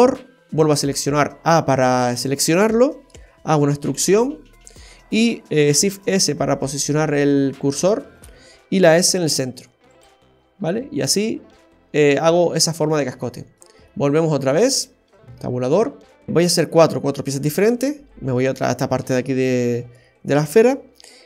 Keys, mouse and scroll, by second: 2.9 middle click, 5.9 shift+s, 11.2 middle click, 13.2 shift+middle click, 13.8 middle click, 15.1 Tab, 16.1 right click.